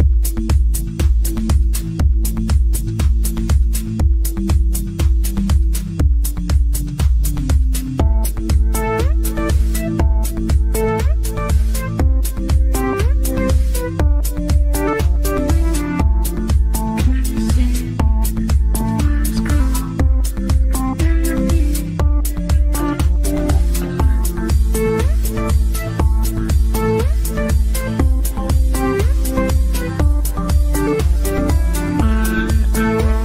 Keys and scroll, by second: 28.6 ctrl+q.